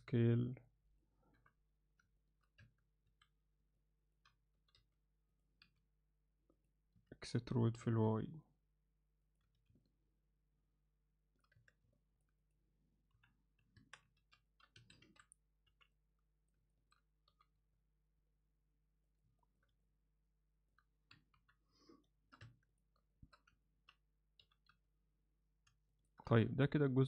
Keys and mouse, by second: 1.4 KP_7, 2.2 ctrl+alt+middle click, 2.7 Tab, 3.1 a, 3.8 ctrl+alt+middle click, 4.6 g, 5.6 s, 7.0 e, 9.5 z, 9.8-11.4 alt+middle drag, 11.6 Tab, 12.0 middle click, 12.5 click, 13.2 KP_1, 13.8 Tab, 14.1 z, 14.5 ctrl+alt+middle click, 14.8 a, 15.7 b, 16.7 ctrl+alt+middle click, 17.3 g, 19.4 ctrl+alt+middle click, 19.8 alt+middle click, 21.4 KP_3, 22.1 shift+middle click, 22.5 Tab, 23.2 shift+middle click, 23.7 ctrl+alt+middle click, 24.4 g, 26.3 z, 26.7-27.0 middle drag.